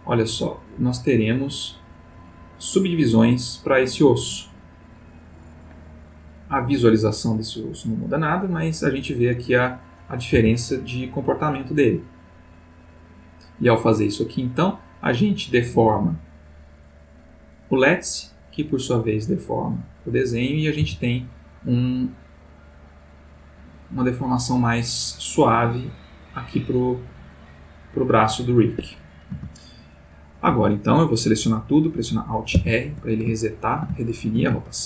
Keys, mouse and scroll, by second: 1.0 click, 2.1-4.2 drag, 5.8 click, 6.9 click, 8.2 click, 9.7 click, 10.3 r, 16.3 click, 17.6 click, 19.0 click, 20.1 click, 20.8 r, 28.8 Escape, 30.5 a, 32.5 alt+r, 33.4-34.0 ctrl+alt+middle drag.